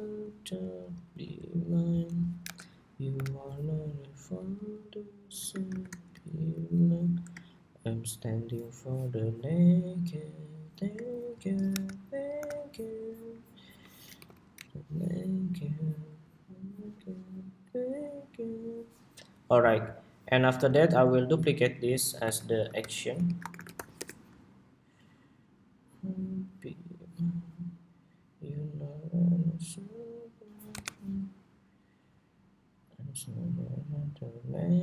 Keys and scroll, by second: 0.8 super+c, 2.2 super+=, 2.8 super+=, 5.4 shift+super+v, 6.3 super+2, 11.4 super+=, 12.2 super+=, 13.3 super+=, 21.3 super+d.